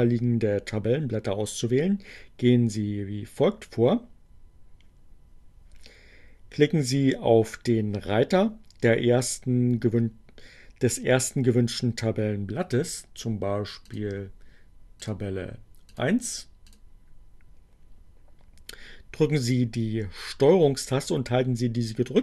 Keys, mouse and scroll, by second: 13.6 click, 14.7 click, 16.0 click, 16.6 click.